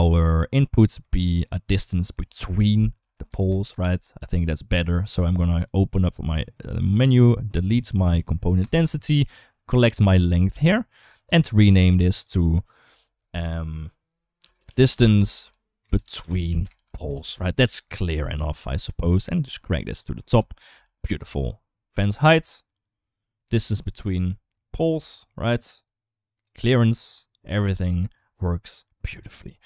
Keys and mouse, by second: 0.5 middle click, 1.7-3.2 drag, 4.6 click, 5.9 click, 6.7 click, 8.4 click, 10.0 click, 10.2-10.7 drag, 11.9 click, 12.2-17.1 drag, 16.3 e, 18.2 click, 21.1 ctrl+s, 22.1-23.3 drag, 23.7-26.3 drag, 26.7-29.0 drag, 29.4 right click.